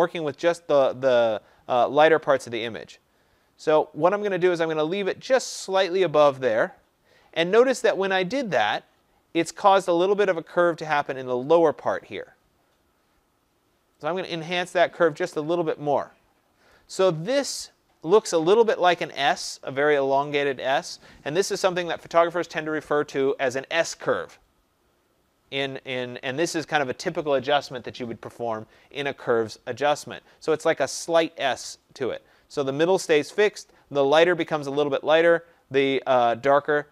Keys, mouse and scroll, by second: 4.4-9.4 drag, 16.6-21.7 drag.